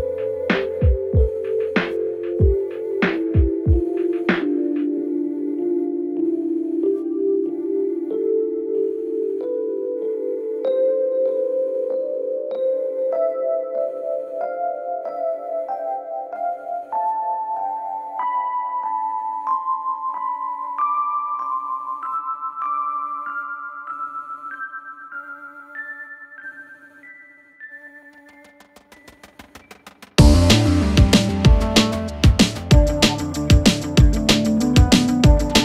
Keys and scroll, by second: 7.8 3, 8.0 ], 9.5 ], 12.8 4, 22.6 3.